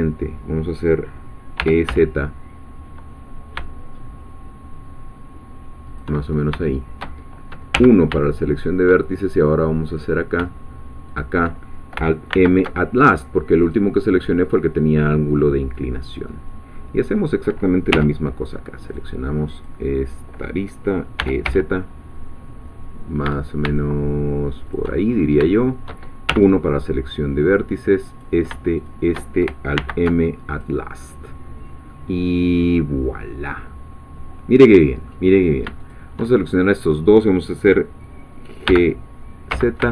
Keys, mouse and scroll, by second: 1.6 e, 1.9 z, 5.9 shift+click, 6.3 shift+scroll up 2, 6.7 shift+middle click, 7.7 1, 8.7 shift+middle click, 9.8 click, 11.2 shift+click, 12.3 alt+m, 13.6 click, 15.1-15.4 scroll down 2, 15.4-17.0 middle drag, 17.0 scroll up 2, 17.9 2, 18.9 click, 19.6 click, 21.0-21.9 typing, 24.7 shift+click, 25.1 shift+scroll up 3, 25.5 shift+middle click, 26.3 shift+1, 28.2 click, 28.8 shift+click, 29.8 alt+m, 30.5 alt+click, 31.2-31.8 scroll down 1, 31.9-35.7 middle drag, 35.8 shift+click, 36.5 shift+scroll up 2, 38.7 g, 39.5 z.